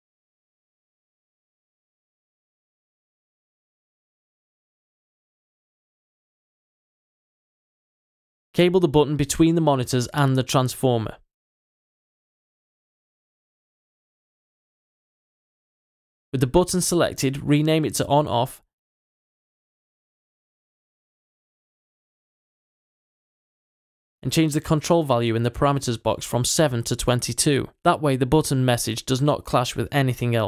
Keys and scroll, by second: 2.8-6.1 typing, 19.1-21.9 typing, 22.4 Return.